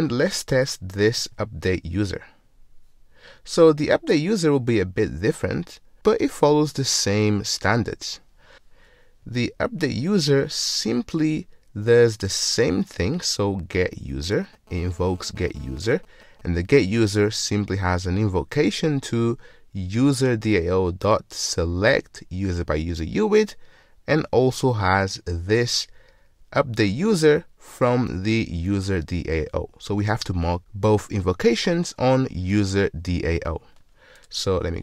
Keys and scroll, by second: 8.5 ctrl+shift+super+t, 34.4 ctrl+Tab.